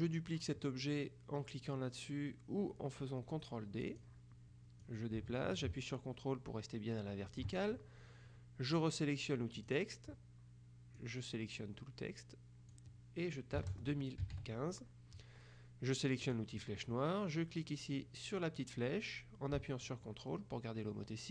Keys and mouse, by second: 4.0 click, 4.9-7.9 drag, 9.7 click, 11.1-13.3 drag, 13.7 KP_2, 13.8 KP_0, 14.3 KP_1, 14.5 KP_5, 16.3 click, 19.9-21.3 ctrl+drag.